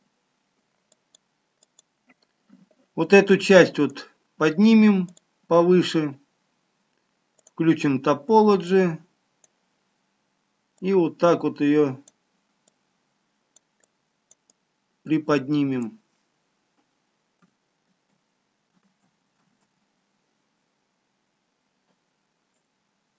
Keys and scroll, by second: 18.3 ctrl+z, 19.3 ctrl+z, 20.0 ctrl+z.